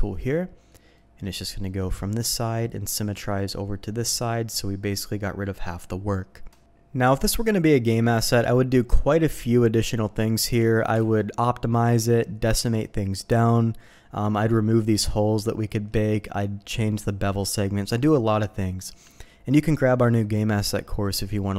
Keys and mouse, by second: 0.1 click, 0.9 middle click, 1.6 middle click, 2.3 middle click, 3.3 middle click, 7.0 middle click, 10.2 middle click, 10.9 alt+a, 14.2 middle click, 15.6 middle click.